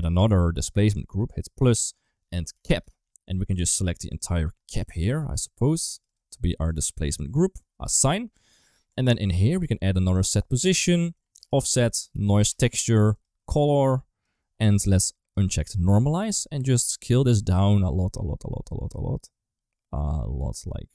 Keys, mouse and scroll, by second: 0.8 click, 1.7-2.7 drag, 3.5 3, 4.0 click, 4.9 shift+click, 5.1 shift+click, 5.3 middle click, 5.9 shift+click, 6.6 shift+click, 7.2 shift+click, 8.8 Tab, 9.3 middle click, 9.8 click, 10.1 shift+d, 11.0-13.0 drag, 13.6 click, 15.2 click, 16.1 click, 17.2-20.9 shift+drag.